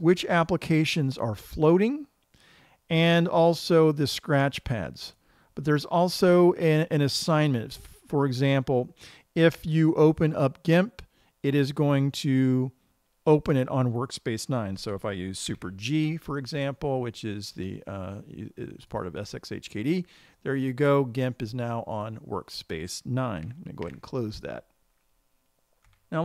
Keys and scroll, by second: 16.0 super+g, 24.3 super+q.